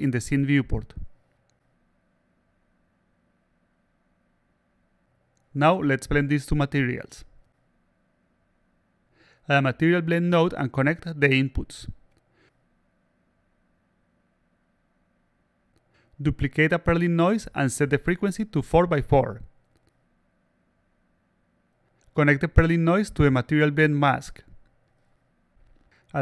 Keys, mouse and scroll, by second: 0.4 click, 1.7-2.4 alt+drag, 2.7-3.2 alt+drag, 5.4 click, 6.3 alt+click, 6.7 click, 8.4 click, 10.4 click, 11.6 click, 12.1 click, 13.2-14.4 drag, 16.4-17.6 shift+drag, 18.5 click, 19.3 click, 22.7-24.1 drag, 25.1 click, 25.9-26.2 drag.